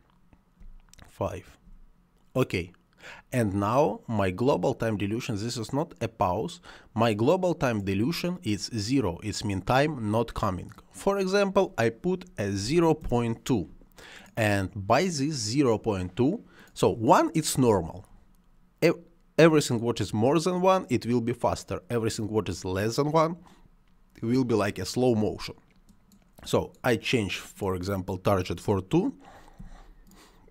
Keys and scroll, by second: 0.5 space, 12.4 ., 12.5 2, 12.9 Return, 29.5 2.